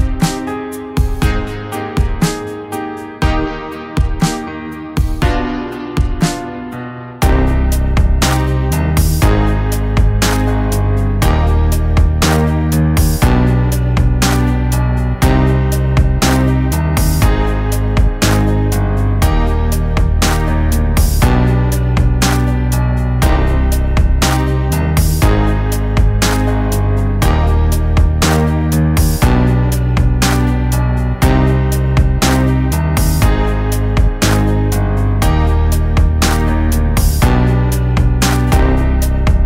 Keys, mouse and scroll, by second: 0.1 click, 2.4 click, 2.4-4.7 drag, 7.4 shift+click, 8.5 right click, 9.7 click, 12.6 Right, 13.6 click, 15.6 click, 16.0 Right, 16.7 click, 16.8 click, 19.3-20.4 drag, 20.8 right click, 21.7 click, 24.8 click, 24.9-25.6 drag.